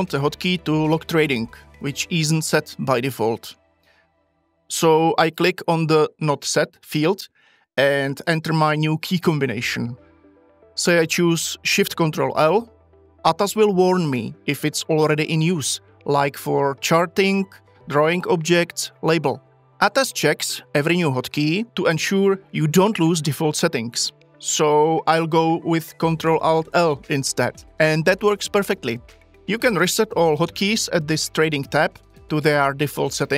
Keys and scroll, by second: 12.1 ctrl+shift+l, 26.2 ctrl+alt+l.